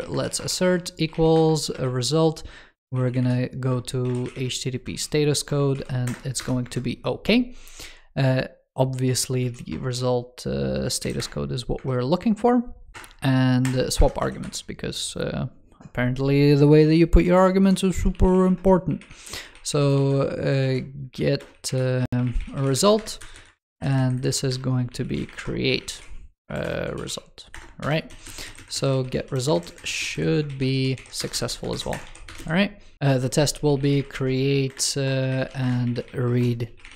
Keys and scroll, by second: 12.9 super+Return, 16.7 super+d, 17.1 super+Down, 17.8 super+Left, 20.5 alt+BackSpace, 23.4 alt+Left, 28.7 ctrl+s, 29.0 super+c, 29.4 super+Right, 29.7 alt+Left, 30.3 ctrl+s, 30.6 super+v, 31.6 super+Right, 31.9 super+s.